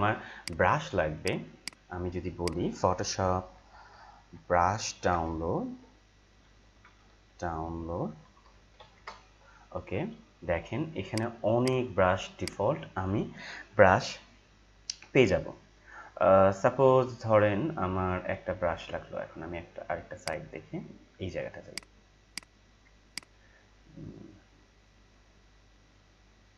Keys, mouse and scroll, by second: 2.9-9.3 typing, 11.1 right click, 11.6 click, 15.3 scroll down 1, 17.9 scroll up 1, 20.1 click, 21.7 right click, 22.3 click, 25.2 click, 25.2 scroll down 1.